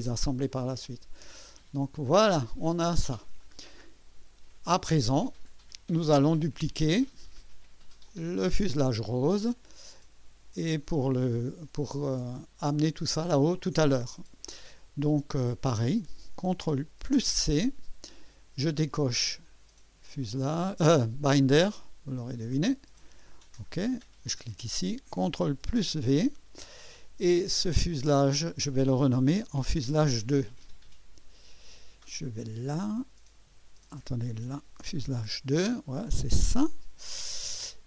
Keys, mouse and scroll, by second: 0.5-2.7 middle drag, 2.8 scroll down 1, 3.4 right click, 8.0 click, 17.1 ctrl+c, 18.9-20.4 drag, 22.1 click, 23.4 click, 24.4 click, 25.6 ctrl+v, 28.3 click, 29.4 F2, 30.6 click, 33.6 Left, 34.4 Right, 34.8 BackSpace, 35.1 BackSpace, 36.4 Return, 36.8-37.5 typing.